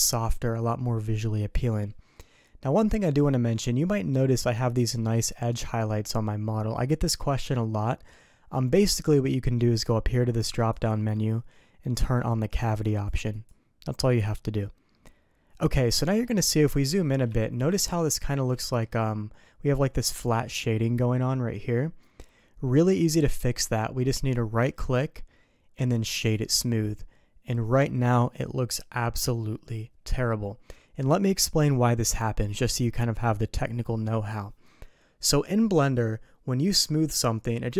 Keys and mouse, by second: 2.2 middle click, 10.7-14.7 drag, 16.1 middle drag, 17.0 middle click, 17.4 shift+middle drag, 18.6 shift+middle click, 18.7 shift+click, 23.0 click, 24.7-26.5 right drag.